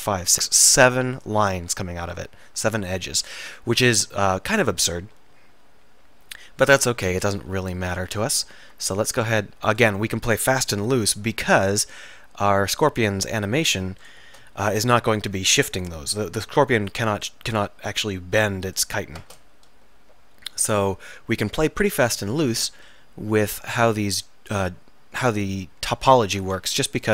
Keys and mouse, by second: 2.9-4.2 middle drag, 4.8 middle click, 8.6 ctrl+r, 11.7 k, 16.1 k, 22.1 k.